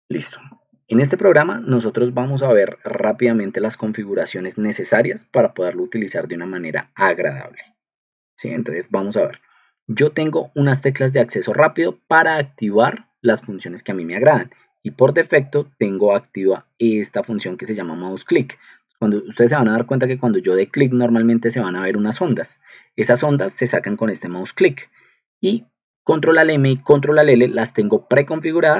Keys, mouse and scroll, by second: 2.2 ctrl+2.